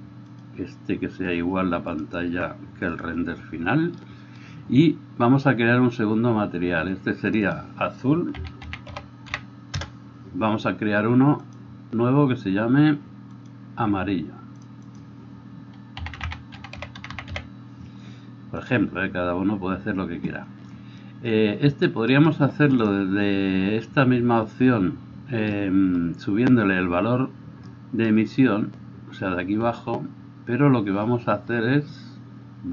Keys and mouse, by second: 0.5-7.6 middle drag, 7.6-14.7 drag, 14.7 middle click, 14.9-18.7 drag, 18.7-32.7 middle drag.